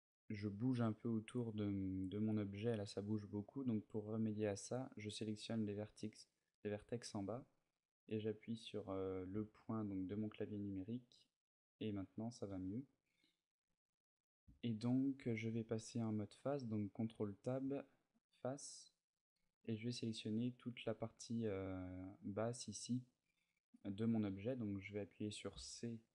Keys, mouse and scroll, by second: 0.3 middle click, 9.1 KP_Decimal, 10.3 middle click, 12.2 a, 12.9 middle click, 15.0 ctrl+Tab, 17.8 middle click, 21.2 middle click, 23.6 middle click, 25.3 c.